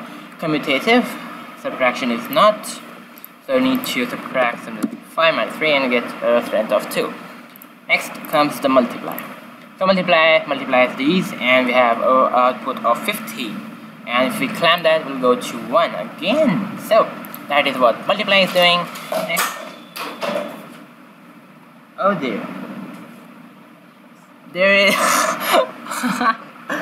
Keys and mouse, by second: 2.1-5.4 drag, 7.5-10.1 drag, 14.7-16.6 drag, 17.2-20.3 drag.